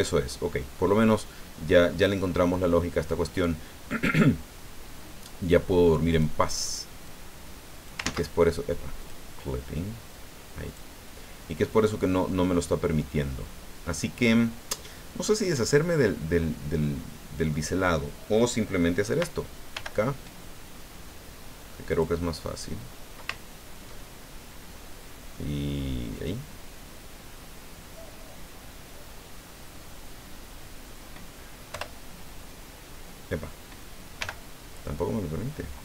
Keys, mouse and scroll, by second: 0.9-3.4 middle drag, 5.0-5.3 scroll up 1, 6.1 right click, 7.0-8.0 drag, 8.0 ctrl+z, 9.0 click, 10.1 click, 15.2-17.7 middle drag, 19.7 k, 21.9 click, 26.1 click, 31.7 Return, 34.2 k.